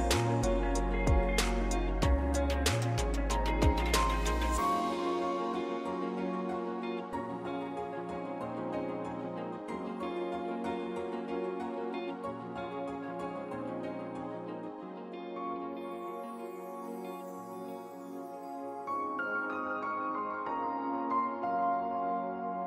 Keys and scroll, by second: 5.1 ctrl+c, 5.6 ctrl+v, 21.7 ctrl+z.